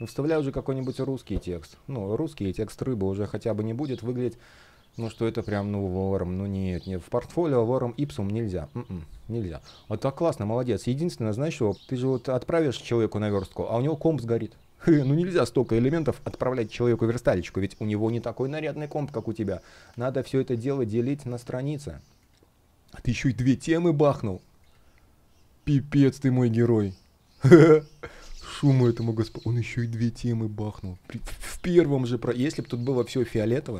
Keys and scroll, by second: 2.0 space, 7.8 space, 10.4 space, 15.8 space, 17.1 super+\.